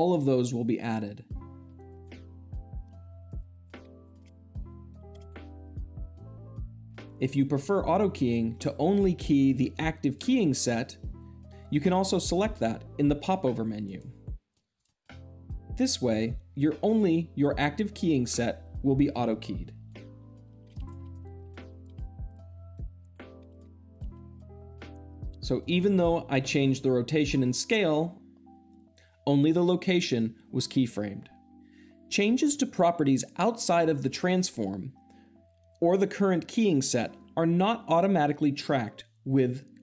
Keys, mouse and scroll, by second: 1.7-2.1 drag, 2.8 Escape, 3.2 click, 3.7 s, 4.0 drag, 9.9-11.0 drag, 13.7-14.4 drag, 14.7 click, 16.0-17.0 drag, 20.5 g, 20.8 click, 20.9 r, 21.1-21.6 drag, 21.6 g, 21.8 click, 21.9 r, 22.2 click, 22.9-23.3 drag, 23.3 g, 23.4 drag, 23.7 s, 23.9 click, 24.0 r, 24.2 click, 24.9-25.5 drag.